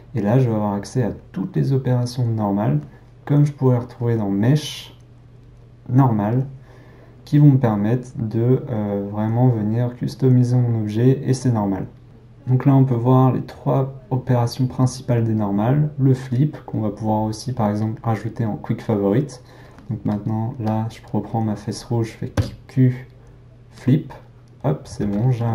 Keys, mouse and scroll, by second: 20.7 click, 23.8 q, 25.0 alt+a.